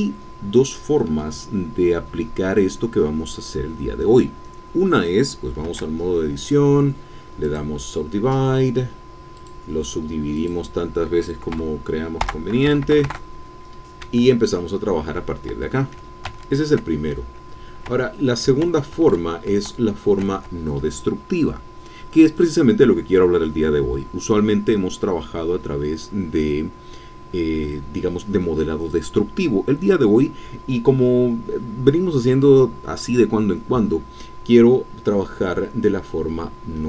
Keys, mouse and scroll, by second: 0.3-1.1 scroll down 1, 1.1-5.6 scroll down 1, 5.6 scroll down 1, 5.7 Tab, 6.4 click, 7.4 click, 9.3 click, 10.3 click, 11.5 KP_2, 12.6 BackSpace, 12.8 KP_0, 13.0 KP_Enter, 14.0 Tab, 16.3 ctrl+z, 17.9 Tab, 18.6 ctrl+z, 20.4 ctrl+Tab.